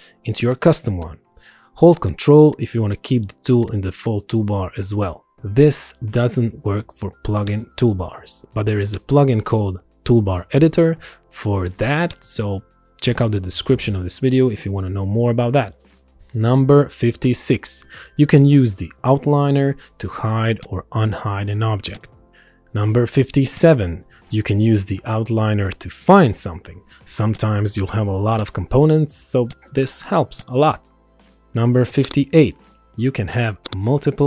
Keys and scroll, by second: 16.2 Return, 24.5 shift+c, 25.1 e, 31.5 ctrl+End.